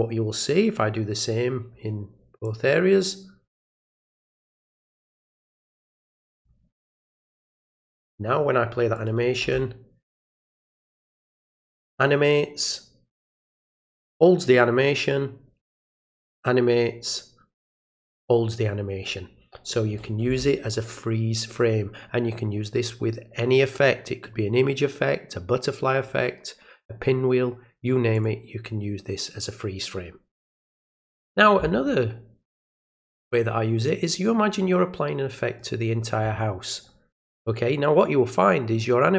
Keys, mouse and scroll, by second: 2.4-4.2 drag, 5.1 click, 6.3 click, 8.9 click, 28.1 click, 32.8-35.6 drag, 38.8 click.